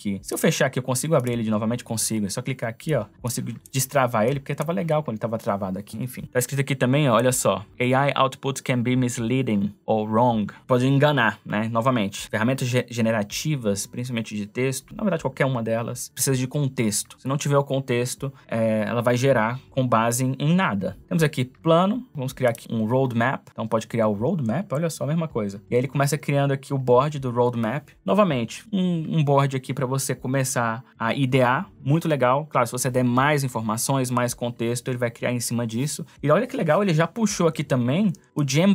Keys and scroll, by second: 37.9 space.